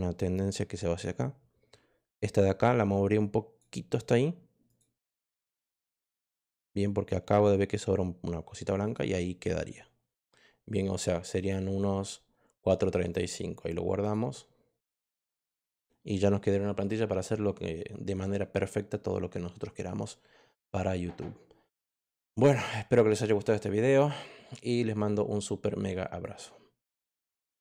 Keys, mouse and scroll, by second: 2.5 click, 4.6 click, 5.9-7.7 drag, 8.8 click, 11.3 click, 13.0 click, 13.9 click, 15.5 click, 26.2 click, 27.5 click.